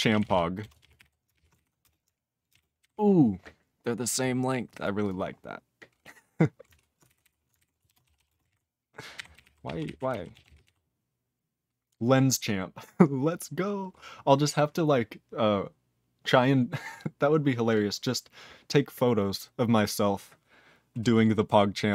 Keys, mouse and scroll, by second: 0.0-1.8 typing, 2.5 ctrl+space, 2.5 ctrl+n, 2.8 ctrl+g, 4.0 click, 4.2 click, 4.7 click, 4.8 click, 5.0 click, 5.0 click, 7.0 alt+b, 7.2 alt+b, 8.0 ctrl+<, 8.1 /, 8.3 space, 8.5 ctrl+e, 9.1 ctrl+g, 9.3 ctrl+n, 9.4 Tab, 9.6 ctrl+p, 9.9 Tab, 10.1 ctrl+n, 10.3 ctrl+a, 10.4 ctrl+k, 10.5 ctrl+p, 10.6 ctrl+e.